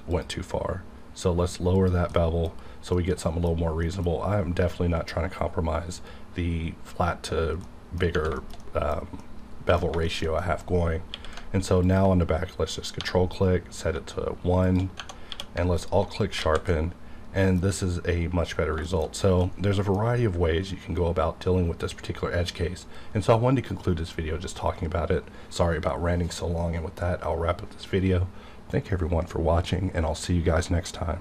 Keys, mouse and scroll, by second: 0.1 click, 2.3-3.9 middle drag, 4.2-4.8 scroll up 1, 7.3 scroll up 1, 7.7 middle click, 8.0 scroll down 1, 8.4 shift+middle click, 8.4 shift+middle click, 9.9 scroll up 1, 10.1 shift+middle click, 10.4 middle click, 11.1 q, 11.8 ctrl+click, 12.7 scroll up 1, 13.0 1, 13.4 scroll up 1, 14.6 shift+click, 15.0 Tab, 15.3 q, 15.7 alt+click, 16.2 scroll down 1, 16.4 alt+a, 16.7 middle click, 16.8-18.8 middle drag, 18.8-19.2 shift+scroll down 2, 18.9 shift+middle click, 19.5-20.8 middle drag, 20.8 scroll down 1.